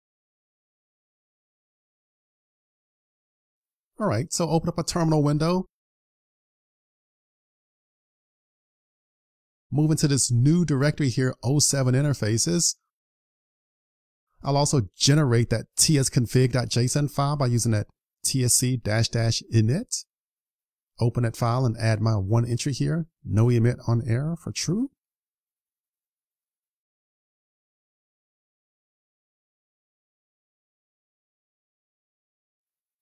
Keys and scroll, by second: 0.1 super+s, 27.7 super+s.